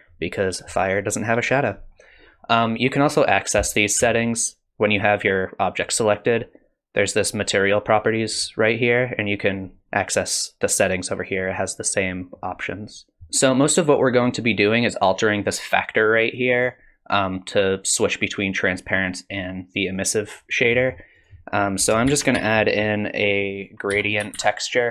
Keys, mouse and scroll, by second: 4.0 n, 8.3 click, 13.2 middle click, 13.2-13.7 scroll up 3, 15.1 click, 20.5-21.2 scroll down 2, 20.8 middle click, 21.2 click, 22.1 shift+a.